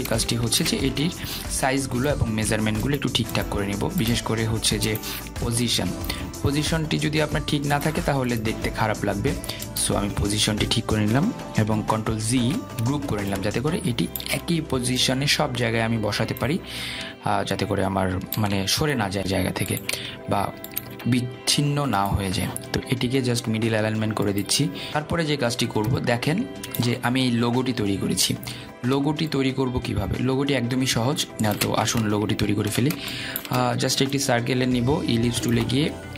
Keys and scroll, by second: 13.0 ctrl+g.